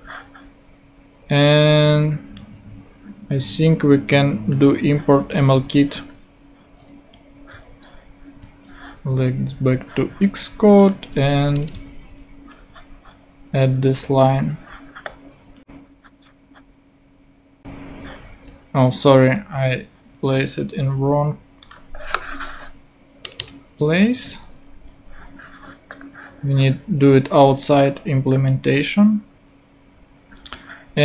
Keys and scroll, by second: 5.4 super+c, 6.0 super+Tab, 7.7 super+Tab, 11.5 Return, 11.7 super+v, 18.9 super+z, 23.2 Return, 24.1 super+Return.